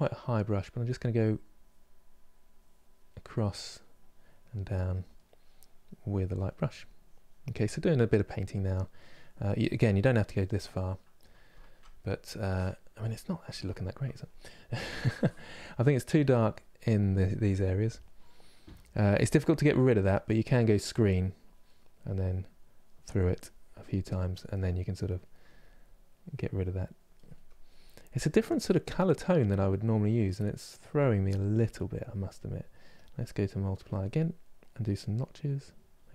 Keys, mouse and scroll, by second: 0.5 f, 1.2-2.8 drag, 2.8 middle click, 3.5 click, 4.0-5.5 middle drag, 5.5 click, 6.1 middle click, 6.6 click, 7.3 middle click, 7.9 click, 8.4 middle click, 8.9 click, 9.4 middle click, 9.9 click, 10.3-16.1 middle drag, 16.1-18.3 drag, 18.3 f, 21.1-25.0 drag, 25.0 middle click, 25.8-27.0 drag, 27.0-33.4 middle drag, 33.4 click, 34.2 middle click, 34.9-36.1 drag.